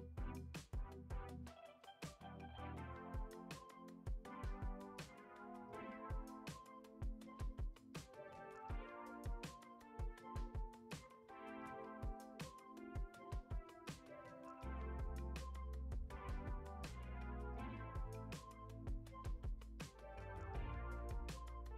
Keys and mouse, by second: 1.4 shift+middle click, 1.8 middle click, 2.3 Tab, 3.2 alt+z, 4.5 g, 5.2 alt+z, 5.6 middle click, 5.9 s, 7.1 g, 9.0-9.3 middle drag, 9.4 g, 10.6 e, 11.6 a, 11.8 g, 13.3 Tab, 13.9 click, 14.1-14.7 drag, 15.6 click, 15.8 click, 16.0 click, 16.4-17.3 right drag, 19.0 click, 19.4 click, 20.0 middle click, 20.5 click, 20.9 middle click.